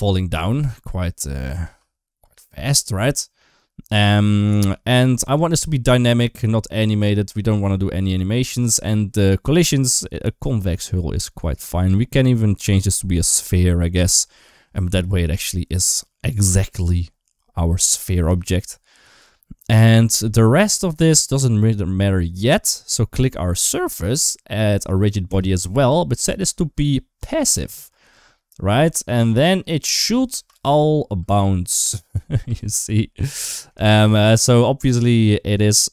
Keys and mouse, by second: 0.2 space, 1.3 click, 1.5 space, 2.0 space, 2.2 click, 10.5-13.1 drag, 18.2 shift+middle click, 25.1 click, 26.1-27.1 drag, 30.1 space, 31.0 space, 31.5 space, 32.3 space, 32.5 middle click, 33.7 shift+middle click.